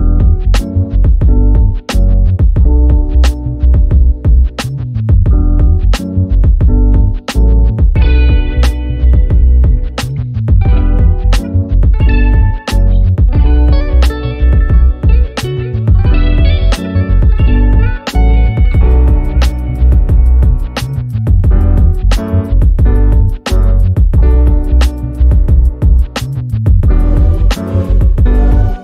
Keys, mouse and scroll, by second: 3.7-4.3 ctrl+drag, 8.9-10.1 ctrl+drag, 10.9 F7, 11.4 click, 11.7 F1, 12.1 click, 12.5 ctrl+scroll down 1, 13.1 ctrl+scroll up 1, 13.9 click, 16.5 ctrl+scroll down 1, 17.3-17.9 click, 17.8 z, 18.1 click, 18.4 F1, 18.9 End, 19.9-20.5 drag, 23.1 ctrl+d, 23.2-24.1 click, 24.7 h, 25.2-26.4 drag, 26.5 ctrl+d, 26.7-27.3 drag.